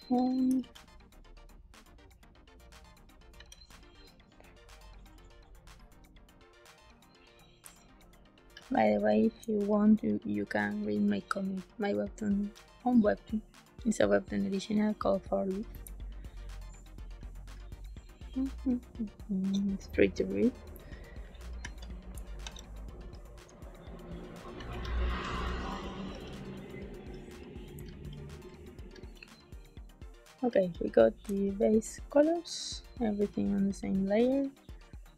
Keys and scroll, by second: 0.5 g, 3.3 b, 7.6 space, 15.8 space, 22.3 s, 22.9 e, 24.5 b, 26.0 z, 27.4 a, 27.7 space.